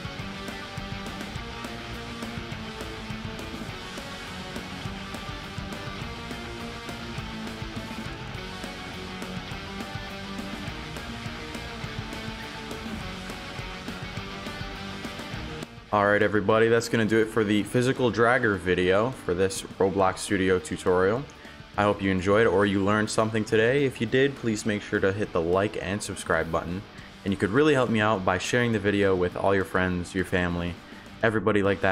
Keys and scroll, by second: 1.3 w, 11.7-13.1 typing.